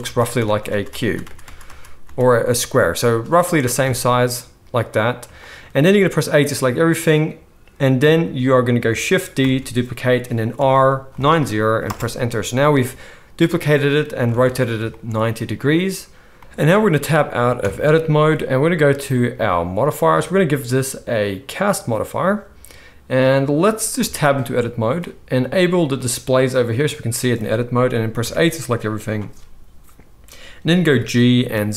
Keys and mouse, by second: 0.0-2.0 typing, 3.8 a, 8.8 shift+click, 9.3 shift+middle click, 9.3 shift+d, 9.4-11.3 drag, 11.3-19.8 middle drag, 14.3 alt+a, 17.6 Tab, 19.8-26.0 drag, 23.9 Tab, 26.0 middle click, 26.5 click, 26.6-31.7 middle drag, 28.2 a, 30.8 g.